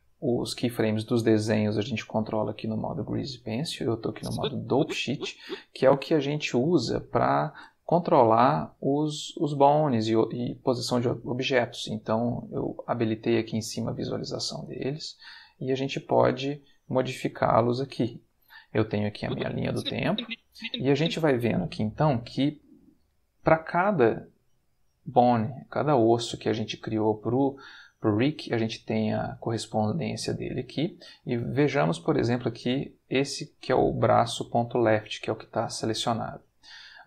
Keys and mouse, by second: 2.7 click, 4.1-5.5 drag, 8.8-10.0 drag, 12.2 click, 12.9 click, 13.7 click, 14.2 click, 15.3 click, 15.8 click, 19.2-21.2 drag, 23.2-24.4 middle drag, 25.7-26.8 middle drag, 32.0 middle click, 32.4 middle click, 36.2 middle click.